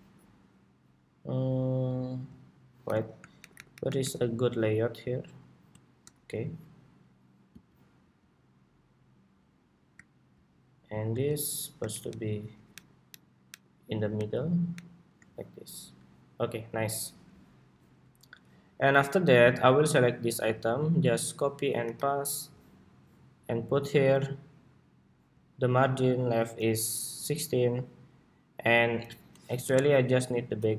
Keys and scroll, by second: 3.5 alt+Up, 11.6 alt+shift+Down, 12.1 alt+shift+Down, 12.7 alt+shift+Down, 12.8 alt+shift+Down, 13.2 alt+shift+Down, 14.2 alt+shift+Up, 14.8 alt+shift+Up, 20.8 super+c, 21.5 super+v.